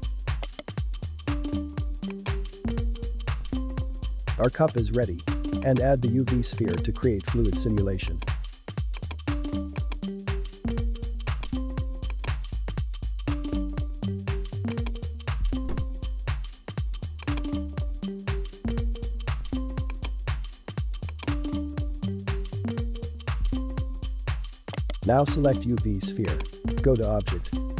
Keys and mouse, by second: 0.4 right click, 2.1 click, 3.0-6.3 drag, 6.3 s, 6.9 g, 8.5 s, 9.8-13.2 drag, 13.2 g, 15.3 g, 17.9 g, 21.1-23.4 drag, 24.7 right click, 26.2-27.7 drag.